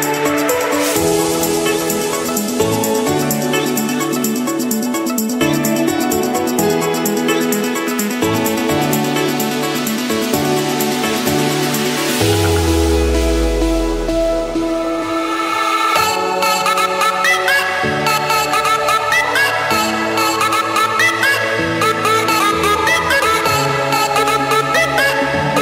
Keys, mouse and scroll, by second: 0.2-0.8 scroll down 3, 5.4-6.6 scroll down 2, 10.2 click, 10.8 Escape, 12.4 middle click, 14.4 click, 16.2 click, 17.4 click, 17.6-18.3 scroll down 2, 18.3-19.5 scroll down 5, 20.6 click, 20.9-21.7 scroll up 8, 24.0 click, 24.3-25.0 scroll down 2, 25.0-25.3 scroll up 2, 25.3 Escape, 25.5-25.6 scroll.